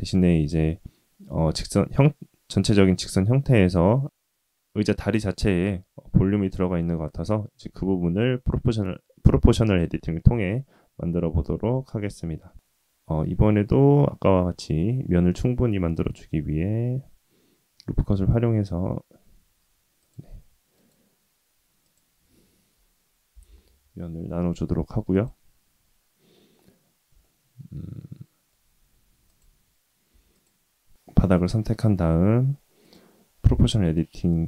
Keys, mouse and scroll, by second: 13.3 Tab, 14.5 ctrl+r, 21.8-23.7 drag, 25.1 click, 27.2 shift+middle click, 27.9 middle click, 28.8-29.2 scroll up 2, 29.2 click, 30.0 3, 30.3 click, 32.8 click.